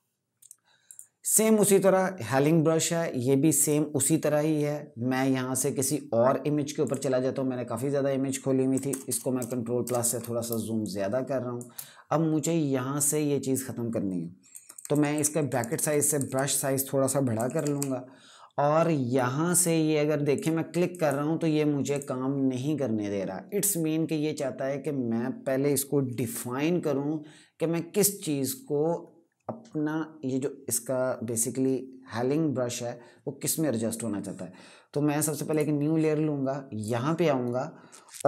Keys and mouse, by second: 0.6 right click, 3.3 click, 8.6 KP_Add, 10.2 space, 10.5 click, 10.7 space, 14.2-16.0 typing, 17.1-17.4 typing, 18.9 click, 35.2 click.